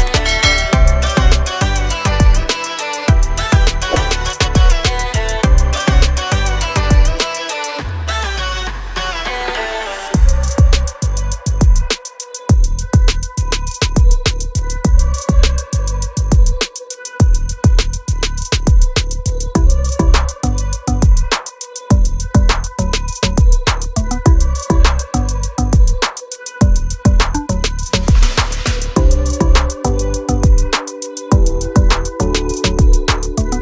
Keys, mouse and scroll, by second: 1.2 click, 7.8 click, 10.2 click, 10.9 double click, 11.7 click, 11.8 double click, 12.2 click, 12.3 double click, 12.8 click, 13.0 double click, 14.8 click, 16.5 click, 18.4 click, 23.8 double click, 26.1 F9, 27.3 F9, 27.7 click, 28.6 scroll down 1, 29.3 scroll up 1, 29.8 ctrl+click, 30.3 click, 32.3 ctrl+click.